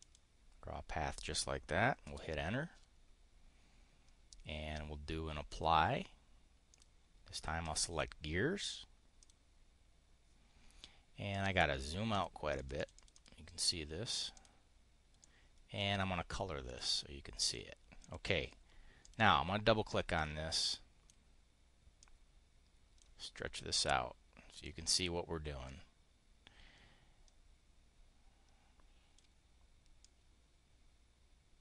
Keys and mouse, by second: 2.0 Return, 5.4 click, 6.7 click, 7.6 click, 9.1 click, 11.2 click, 12.1 click, 12.4 click, 12.8 click, 14.0 click, 14.2 click, 15.1 click, 16.6 click, 17.3 click, 17.8 click, 18.9 click, 20.0 click, 21.9 click, 23.6 click, 25.6-29.2 drag, 29.9-31.6 drag.